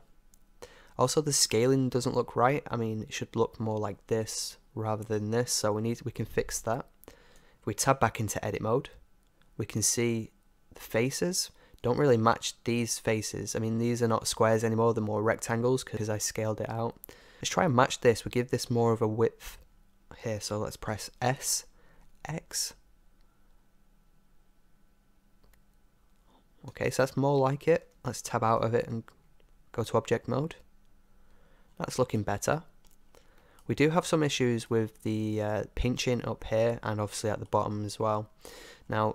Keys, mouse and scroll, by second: 6.5-8.5 drag, 8.5 Tab, 10.0-14.3 middle drag, 17.3-18.7 middle drag, 19.7-21.3 middle drag, 21.3 s, 30.7 Tab, 31.7-39.1 middle drag.